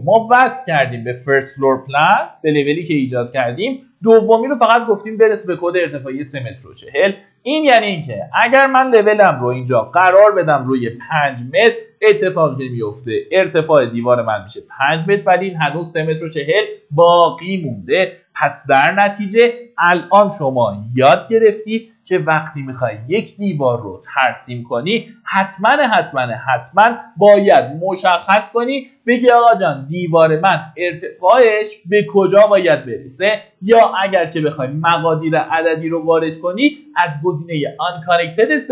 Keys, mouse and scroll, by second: 10.1 KP_5, 18.0 click, 19.9 KP_3, 20.0 KP_Decimal, 20.3 KP_4, 22.7 click, 23.8 middle click, 24.9-26.0 drag, 25.8 Delete, 26.4 middle click, 26.8-27.8 typing, 31.0-38.7 drag.